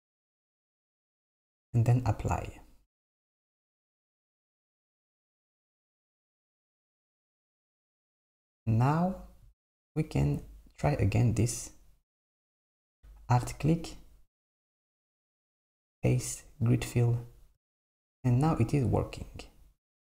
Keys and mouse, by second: 3.9 Tab, 5.3-7.1 drag, 7.1 Tab, 9.1 click, 9.8 alt+click, 15.8-17.7 drag.